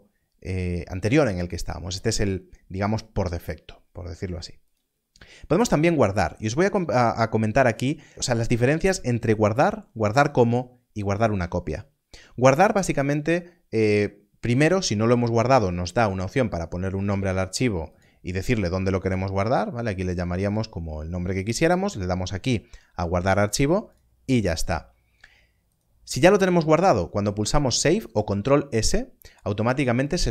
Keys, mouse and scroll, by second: 4.6 click, 17.9 click, 23.5 click.